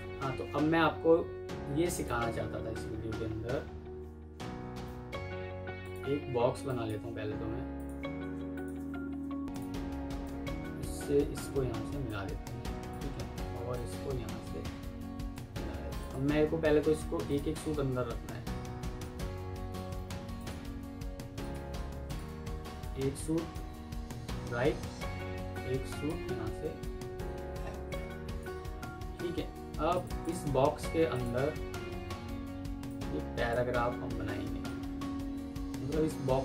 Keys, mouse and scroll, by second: 8.4 shift+click, 8.8 typing, 9.1 Escape, 16.6 Escape, 22.0 ctrl+click, 22.2 ctrl+q, 23.9 Right, 27.0 Left, 28.6 Up, 30.1 double click.